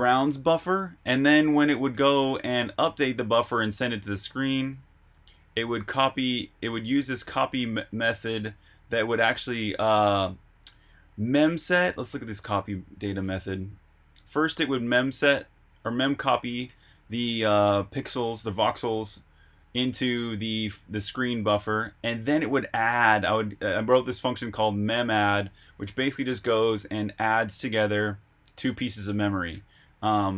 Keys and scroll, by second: 0.7 Escape, 1.1-7.5 typing, 8.6-9.7 typing, 11.3-14.8 typing, 13.7 Escape, 21.3 Escape, 21.4-25.3 typing, 23.6 Escape, 26.5 k, 28.5-30.3 typing, 29.2 Escape.